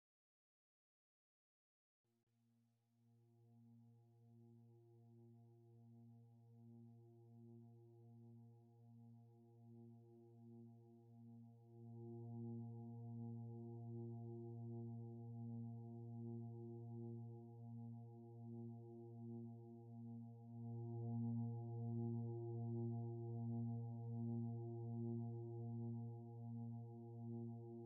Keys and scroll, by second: 9.8 ctrl+t, 20.7 ctrl+j, 21.0 ctrl+t.